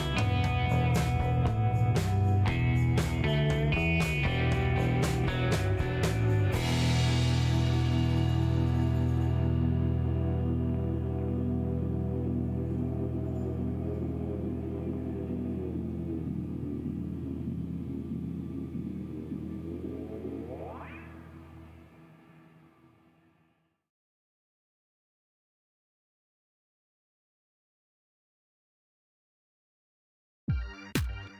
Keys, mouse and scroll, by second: 0.1 middle click, 1.1 click, 2.5 click, 3.7 click, 4.1 middle click, 5.0 middle click, 6.0 click, 7.0 click, 8.2 click, 9.6 click, 10.9 click, 12.1 click, 14.8 click, 15.9 middle click, 17.8-18.3 scroll up 4, 19.4 click, 20.1 click, 21.3 click, 21.8 middle click, 22.5 middle click, 23.5 click, 24.5 click, 25.6 click, 26.0 middle click, 26.5 middle click, 27.6 click, 28.6 click, 29.7 click, 30.1 middle click, 30.3 scroll down 1, 30.5 middle click.